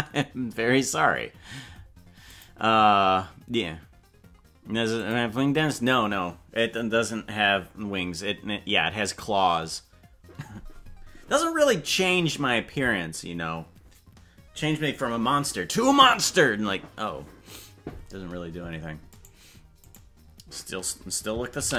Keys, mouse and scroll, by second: 19.2 right click, 19.9 right click.